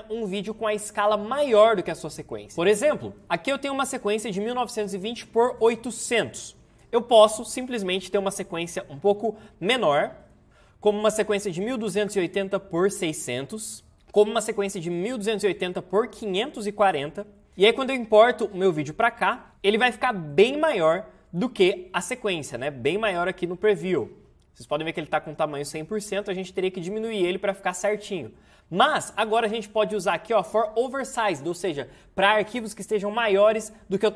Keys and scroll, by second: 10.4 Tab, 28.1 ctrl+z.